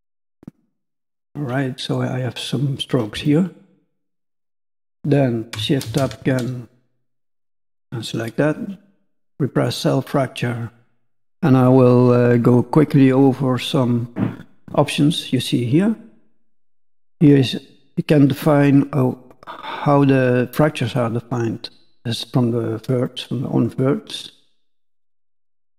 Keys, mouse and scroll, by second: 0.6 middle click, 3.7 shift+middle click, 3.9 middle click, 5.8 shift+space, 8.1-8.8 scroll up 1, 9.5 click, 24.5 click.